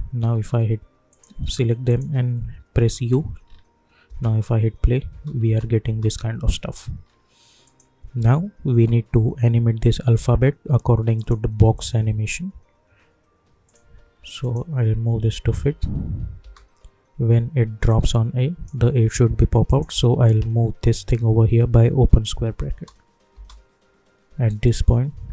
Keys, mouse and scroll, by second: 1.1 click, 1.9 shift+click, 2.8 u, 3.4 scroll down 1, 4.0 space, 6.5 click, 7.0 scroll up 1, 7.6 click, 8.1 u, 9.1 u, 11.2 click, 12.2 scroll down 1, 13.6 click, 15.6 space, 17.9-19.6 drag, 21.9 [, 23.3 space, 24.4-25.3 drag.